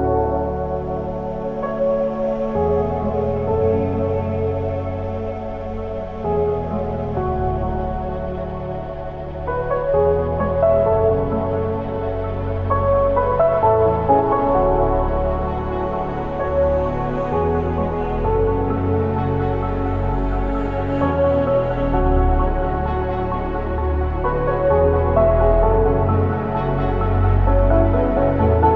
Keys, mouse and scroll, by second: 1.1 click, 4.7 click, 5.1 alt+click, 6.2 s, 8.9 click, 11.7 ctrl+r, 14.7 click, 15.5 s, 17.6 click, 20.3 ctrl+r, 24.1 click, 25.8 ctrl+r, 28.4 click.